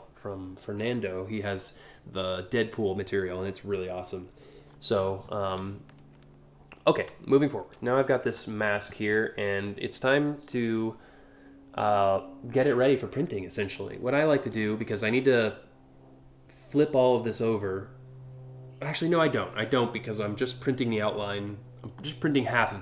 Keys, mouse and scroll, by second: 0.0 alt+scroll up 1, 0.4-0.8 alt+scroll down 2, 13.3 click.